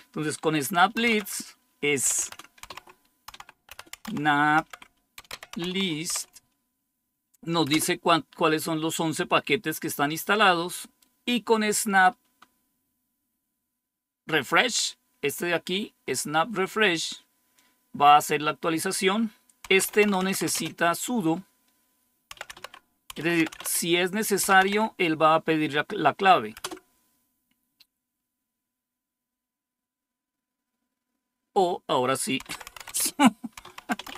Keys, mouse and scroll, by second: 0.7-6.5 typing, 7.6 Return, 17.4-19.4 drag, 19.4-20.6 typing, 22.0-25.0 typing, 26.5 typing, 32.1-34.1 typing.